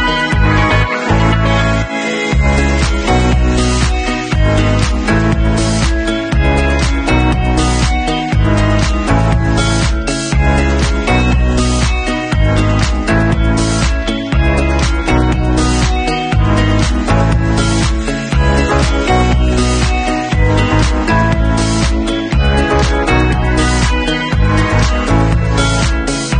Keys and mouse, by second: 0.8 middle click, 1.2-3.2 drag, 3.2 middle click, 3.8-11.8 alt+drag, 10.1 shift+q, 11.8-13.8 middle drag, 12.6 ctrl+s, 13.8-15.8 alt+drag, 15.2 Tab, 15.8 middle click, 16.7 click, 16.7 middle click, 17.7 click, 17.7 alt+middle click, 18.0-26.3 alt+drag, 19.7 shift+q.